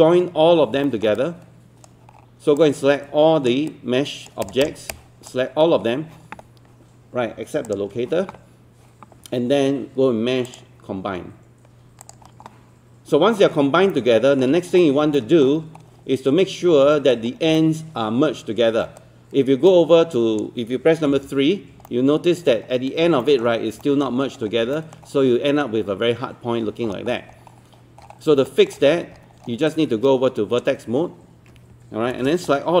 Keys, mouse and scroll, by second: 0.9 alt+middle click, 1.2 right click, 2.1-2.6 scroll down 1, 2.6 click, 3.7 right click, 4.4 click, 5.6-7.6 scroll up 1, 7.7 ctrl+click, 13.3-13.9 scroll up 1, 14.0 alt+middle click, 14.6-15.1 scroll up 1, 15.2 alt+middle click, 15.6-16.7 scroll up 1, 16.7 scroll down 1, 17.6 alt+middle click, 19.0-21.0 right drag, 21.1 3, 21.9 alt+middle click, 22.7-23.0 scroll up 1, 23.2 alt+middle click, 24.0 alt+middle click, 24.2-24.8 scroll up 2, 24.8 alt+middle click, 26.6-27.6 scroll down 1, 27.6 scroll up 1, 27.8-28.3 scroll down 1, 28.5 alt+middle click, 28.8 scroll up 1, 28.9 scroll down 1, 29.0-29.4 scroll up 1, 29.4 scroll down 1, 29.5 scroll up 1, 29.7 right click, 32.1 ctrl+space, 32.5 scroll down 1.